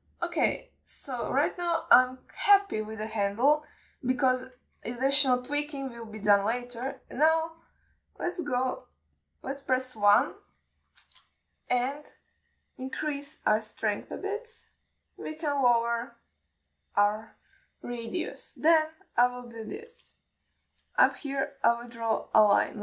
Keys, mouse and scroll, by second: 3.6 shift+middle click, 4.1 ctrl+alt+middle click, 10.5 click, 11.8 shift+middle click, 14.4-15.7 drag, 21.5 alt+shift+middle click, 22.6-22.8 drag.